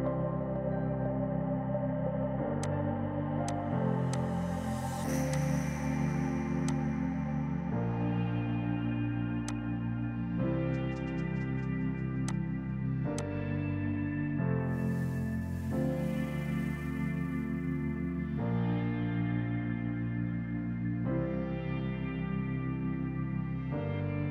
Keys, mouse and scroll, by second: 0.3 KP_9, 0.6 KP_Enter, 1.9 space, 2.7 click, 4.7 space, 5.4 click, 5.7 space, 6.7 click, 7.7 KP_5, 7.9 Return, 9.5 click, 12.3 click, 13.2 click, 14.4 space.